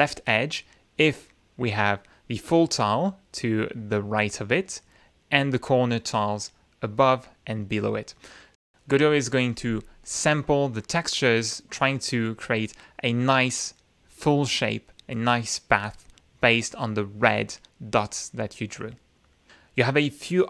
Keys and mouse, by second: 1.6-2.9 drag, 5.3 click, 5.9 click.